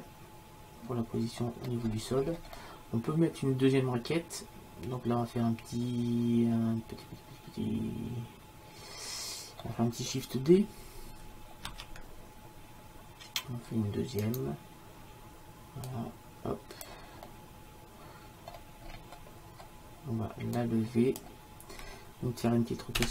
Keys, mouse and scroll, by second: 0.0 middle click, 0.9 middle click, 1.1 middle click, 1.2 middle click, 1.9 middle click, 4.2 middle click, 12.1 shift+d, 15.9-17.3 drag, 17.3-18.9 middle drag, 20.6-23.0 drag, 23.0 r.